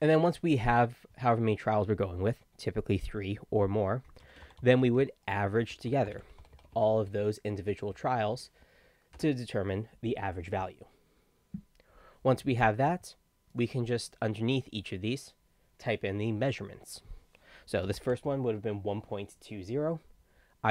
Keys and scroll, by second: 4.0-8.2 typing, 9.1 Return, 17.7-18.8 typing.